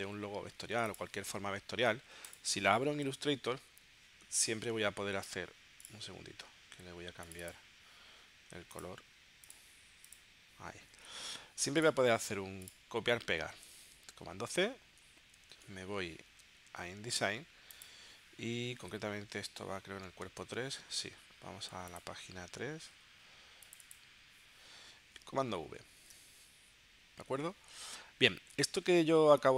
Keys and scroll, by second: 14.5 super+c, 18.9 super+Tab, 26.0 super+v.